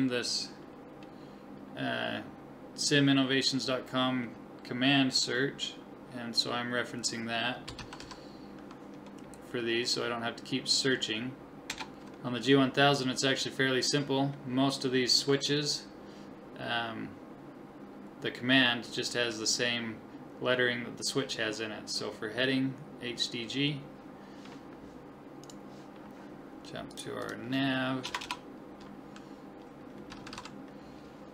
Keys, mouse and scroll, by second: 25.4-26.9 drag, 26.9 middle click, 27.4 click, 28.2 BackSpace.